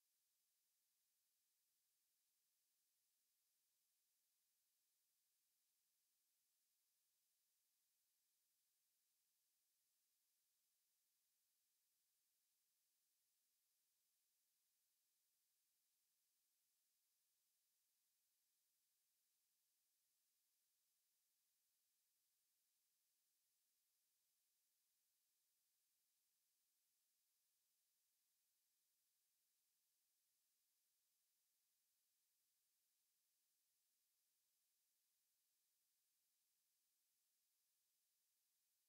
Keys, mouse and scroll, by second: 2.0 click, 2.3 x, 4.9 x, 18.9-23.3 middle drag, 28.7-33.5 middle drag.